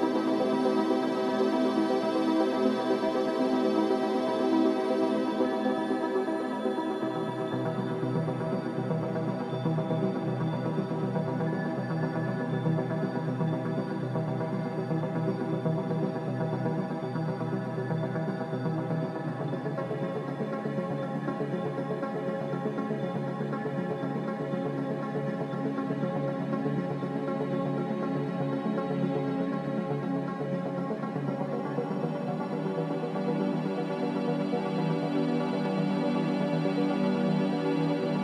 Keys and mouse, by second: 14.4 s, 15.3-16.3 drag, 19.4-24.7 drag, 27.2-30.9 drag, 31.6 s, 35.4 g.